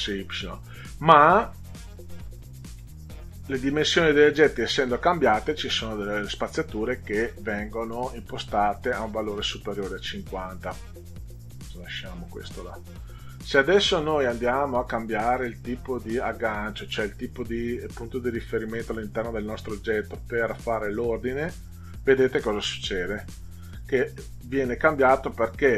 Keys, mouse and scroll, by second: 11.1 click, 13.6 click, 21.2 click.